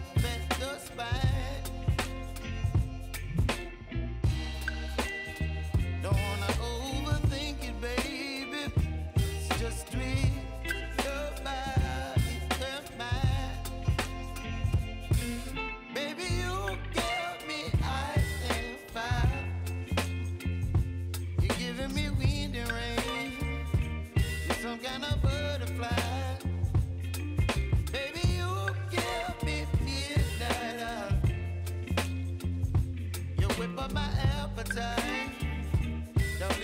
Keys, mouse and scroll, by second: 1.7 s, 2.6 click, 3.5 =, 3.7 =, 4.9 click, 8.0 j, 9.5 click, 10.2 Return, 11.3 click, 12.6 F9, 13.4 click, 14.2 space, 16.6 click, 17.1 ctrl+d, 17.6-19.5 drag, 20.3 F4, 20.8 click, 24.1 u, 25.6-26.9 drag, 27.8-31.0 drag, 31.0 click, 34.4 click, 34.8-35.7 scroll down 1, 35.7 click, 35.8 space.